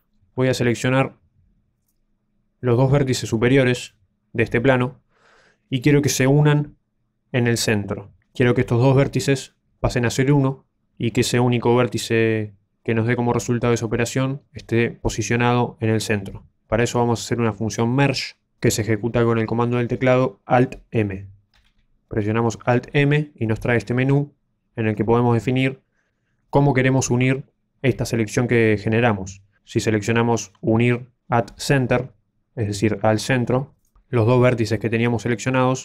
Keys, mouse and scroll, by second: 0.3-1.8 scroll up 2, 0.7 shift+middle click, 1.8 click, 2.6 right click, 3.7 shift+right click, 21.5 alt+m.